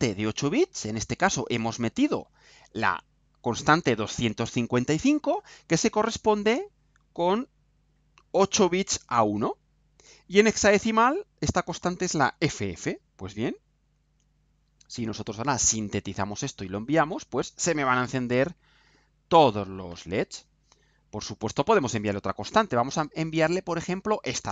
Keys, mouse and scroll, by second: 5.4 click, 13.9 ctrl+u, 24.2 click.